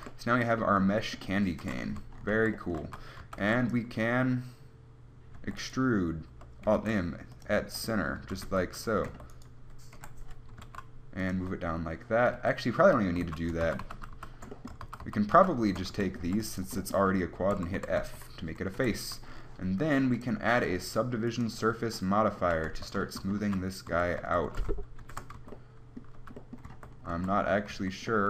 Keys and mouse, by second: 0.0 a, 0.2 a, 1.9-3.7 typing, 5.6 e, 8.5 a, 8.7 Tab, 9.3 Tab, 10.2 KP_1, 10.8 g, 11.4 click, 11.6 Tab, 12.6 Tab, 13.3 g, 13.9 ctrl+z, 14.1 ctrl+z, 15.6 ctrl+z, 16.1 a, 16.5 b, 17.8 f, 18.0 a, 18.3 Tab, 19.0 KP_1, 19.2 z, 22.9 Tab, 23.7 z, 24.1-24.7 a, 25.3 ctrl+n, 25.6 Tab, 26.5 z, 26.9 Tab, 27.4 a, 28.0 Tab.